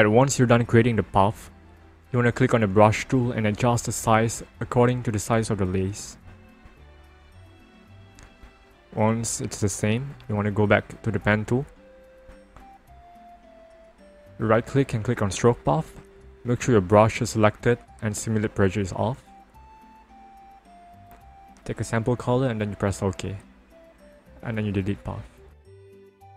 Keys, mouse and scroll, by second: 2.5 click, 3.5-3.8 ctrl+alt+scroll up 1, 5.7 alt+right click, 8.8 alt+right click, 10.1-11.4 ctrl+alt+scroll down 1, 11.5-12.8 ctrl+alt+scroll down 1, 13.7 click, 14.9 right click, 16.1 click, 19.6 click, 20.9 click, 23.3 right click, 24.1 click, 25.9 click.